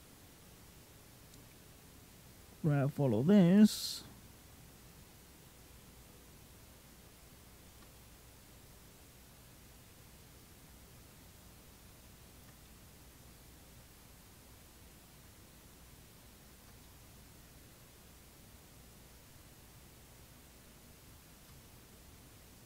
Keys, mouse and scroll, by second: 3.6 middle click, 4.7 click, 7.8 middle click, 8.5 click, 12.5 middle click, 13.3 click, 16.7 middle click, 17.5 click, 21.5 middle click, 22.5 click.